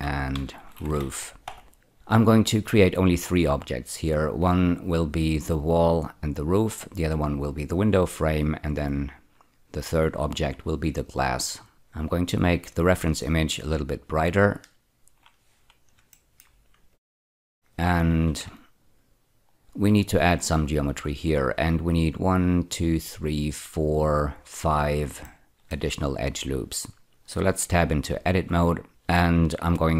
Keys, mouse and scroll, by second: 0.0-1.2 typing, 1.4 Return, 12.7 click, 14.5 click, 14.8 click, 16.1 shift+middle click, 16.9 click, 17.6 shift+right click, 18.7 ctrl+middle click, 25.2 shift+middle click, 26.4-28.2 scroll up 1, 28.3 Tab, 28.9 2.